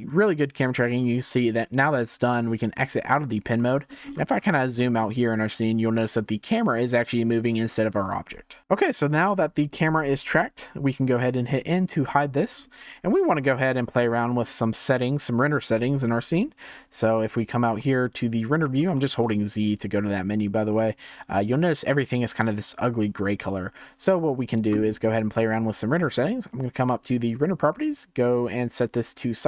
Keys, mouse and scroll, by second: 0.0-3.5 drag, 3.5-3.8 middle drag, 3.8-4.7 scroll down 17, 4.7-5.9 shift+middle drag, 5.9-8.6 drag, 8.6 shift+middle drag, 8.9-9.3 scroll down 2, 9.3-11.3 shift+middle drag, 11.3 n, 12.1-12.7 shift+middle drag, 12.7 scroll up 4, 13.3 scroll down 4, 13.9-16.7 shift+middle drag, 16.7 z, 18.1-18.4 scroll down 1, 18.4-18.9 scroll up 2, 18.9-20.4 shift+middle drag, 20.4-23.4 scroll up 1, 27.3 click, 28.1-29.4 drag.